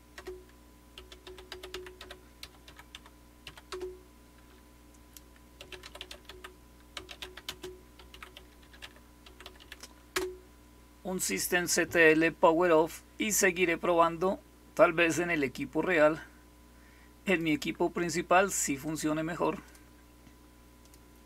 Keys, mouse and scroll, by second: 0.0-3.4 typing, 0.0 Return, 3.6 Return, 5.3-10.0 typing, 17.1 click, 18.7 click, 19.6 click, 20.7 click, 21.1 click.